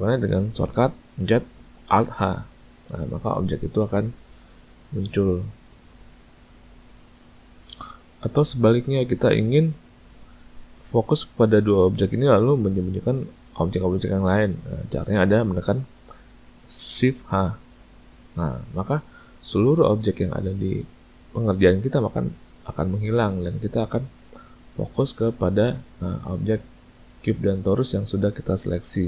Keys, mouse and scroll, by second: 2.2 alt+h, 17.3 shift+h, 25.4 middle click.